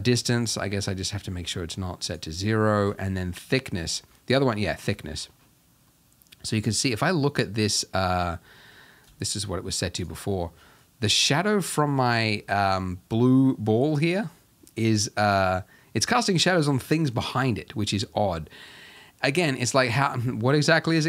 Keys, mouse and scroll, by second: 3.1-4.1 drag, 4.1 middle drag, 4.4-5.0 scroll up 2, 5.0 shift+middle drag, 5.3-5.9 scroll up 2, 5.9-9.2 middle drag, 9.2-10.4 drag, 10.4-21.0 middle drag.